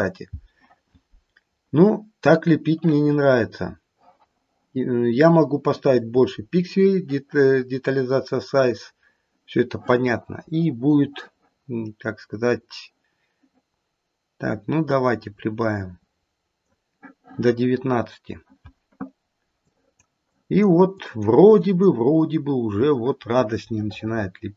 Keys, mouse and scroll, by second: 15.2 click, 19.6 click, 20.2 click, 20.9 click, 21.6 click, 23.7 middle click.